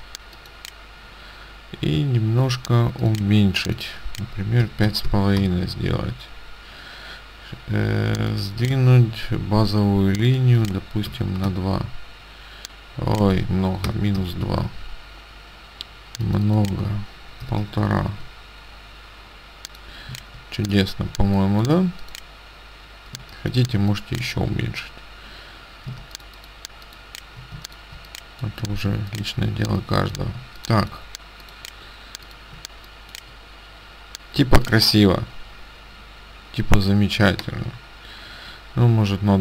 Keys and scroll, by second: 4.7 KP_5, 5.2 KP_5, 11.2 KP_2, 11.5 Tab, 13.9 KP_Subtract, 14.2 KP_2, 14.4 Tab, 17.6 KP_1, 20.2 ctrl+space, 23.2 space, 26.0 ctrl+space, 28.9 space, 34.5 space.